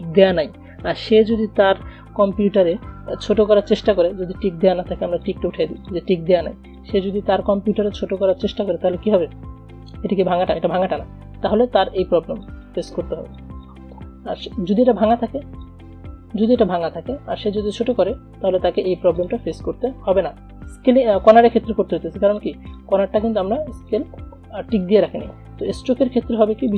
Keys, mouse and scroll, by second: 2.4-5.4 drag, 12.0 shift+click, 13.1 shift+click, 16.1-17.2 drag, 18.2-19.2 shift+drag, 20.6 ctrl+z, 22.1 a, 22.4 click, 26.7 v.